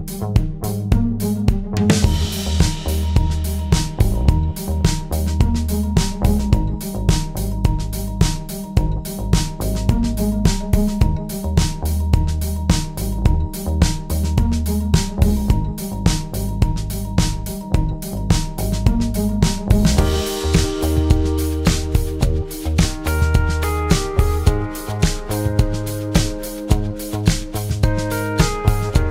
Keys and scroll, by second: 0.5 ctrl+d, 1.1 ctrl+*, 1.7 typing, 3.3 shift+F6, 9.3 F1, 11.3 Page_Down, 12.3-12.9 typing, 13.4 shift+F6, 17.5 F1, 18.1 F7, 19.1 F1, 20.6-21.5 typing, 21.5 shift+F6, 24.5 F1, 25.5-25.9 typing, 26.6 shift+F6, 28.4 F1, 28.8 Page_Down.